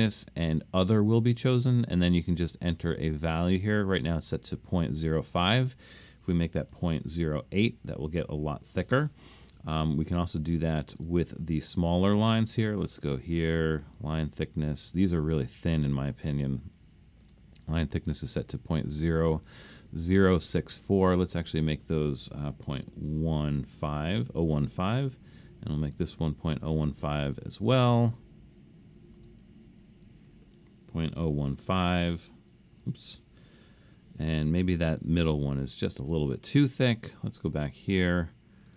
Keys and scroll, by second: 6.8 8, 23.4-23.8 typing, 30.7-33.7 typing.